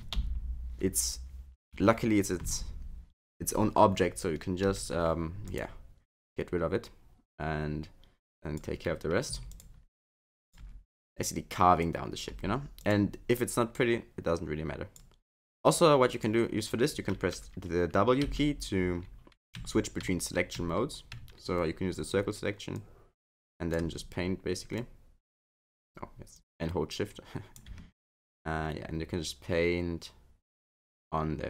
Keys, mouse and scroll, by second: 0.2 ctrl+l, 4.6 Delete, 8.2 click, 9.3 x, 10.1 click, 10.6 x, 11.8 click, 12.3 x, 13.7 click, 15.4 x, 18.2 w, 19.5 w, 20.0 w, 20.6 w, 21.1 w, 22.7 click, 24.8 click, 26.3 click, 28.3 shift+click.